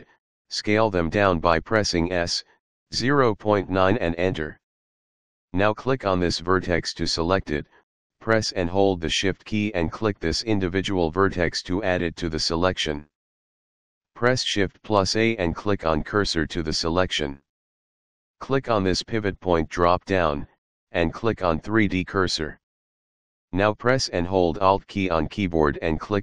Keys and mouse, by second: 1.1 KP_Decimal, 2.0 KP_9, 2.8 Return, 6.2 click, 7.8 shift+click, 14.3 shift+s, 16.8 click, 19.1 click, 21.6 click, 22.5 click.